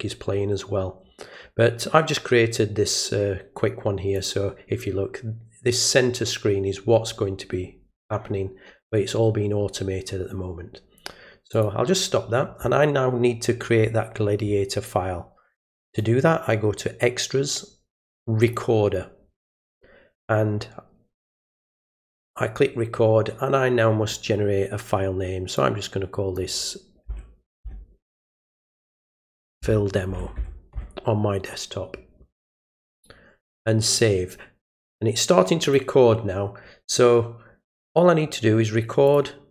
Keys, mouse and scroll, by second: 4.1 click, 11.5 click, 15.9 click, 18.4 click, 21.9 click, 25.5 click, 33.8 click, 35.6 click, 39.1 click.